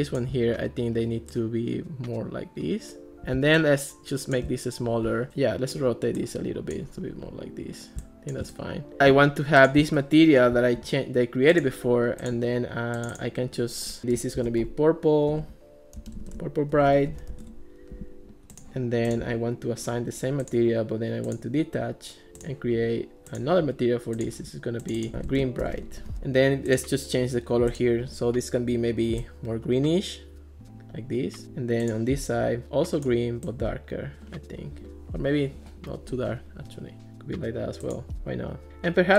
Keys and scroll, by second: 14.2-17.8 typing, 24.9-26.5 typing.